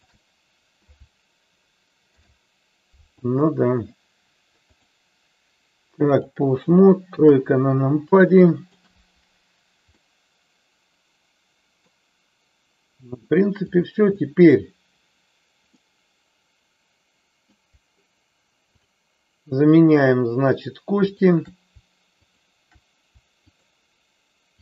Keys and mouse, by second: 0.0 shift+click, 2.1 ctrl+p, 4.8-6.4 drag, 7.2 KP_3, 8.4 shift+middle click, 10.0-12.0 middle drag, 13.6-15.2 drag, 15.7-17.6 middle drag, 18.6-20.4 shift+drag, 21.2-22.7 shift+drag.